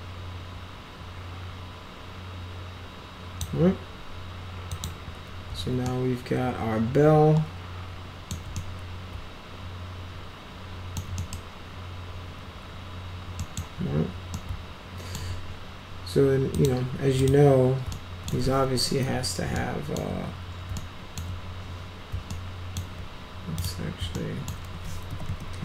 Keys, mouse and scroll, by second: 4.6 click, 5.8-8.2 alt+middle drag, 8.5-10.9 middle drag, 11.1 middle click, 13.3 middle click, 14.3 alt+middle click, 16.4 click, 17.1 click, 17.8 alt+middle click, 18.6 w, 19.5 alt+middle click, 20.7 alt+middle click, 22.2-22.7 alt+middle drag, 23.5 click, 24.1 alt+middle click, 24.8-25.6 typing.